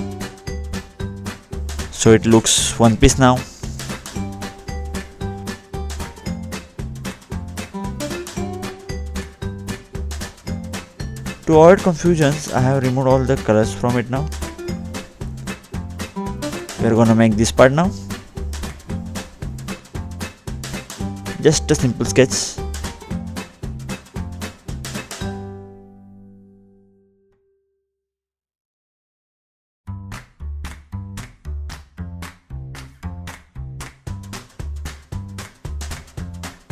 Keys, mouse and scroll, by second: 1.6-2.4 scroll up 2, 3.9 middle click, 5.3-5.8 scroll down 2, 5.8 click, 6.2 middle click, 7.3-7.7 scroll up 1, 7.8 middle click, 11.4 middle click, 11.4-12.4 scroll up 1, 14.0-15.6 scroll down 2, 18.7 click, 18.7-19.1 scroll down 2, 19.7 click, 20.4 middle click, 22.6 ctrl+8, 25.5-27.1 scroll down 2, 32.5 click, 35.2 click.